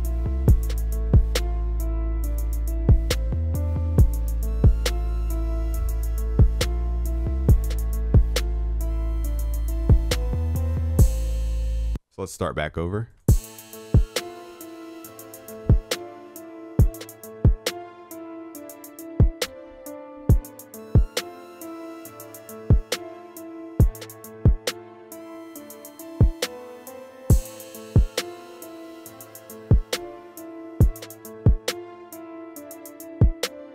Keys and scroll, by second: 4.8 ctrl+s, 15.7 ctrl+s.